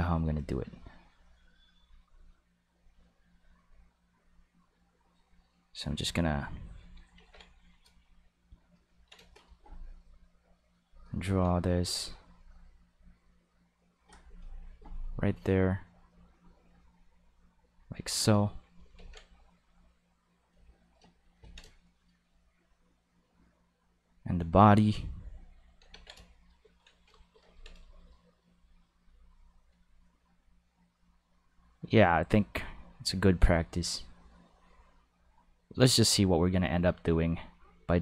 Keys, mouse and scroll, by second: 0.7-1.8 drag, 2.7 click, 4.0-5.9 drag, 7.2 ctrl+s, 8.0 shift+middle click, 9.0 ctrl+middle click, 10.2 click, 11.2 ctrl+z, 11.6 click, 13.0 click, 15.6-17.4 drag, 17.6 click, 19.0 ctrl+z, 19.6 click, 22.7-24.8 drag, 25.9 ctrl+s, 28.9 click, 30.2-32.0 drag, 32.6 click, 33.9 click, 36.8-38.0 drag.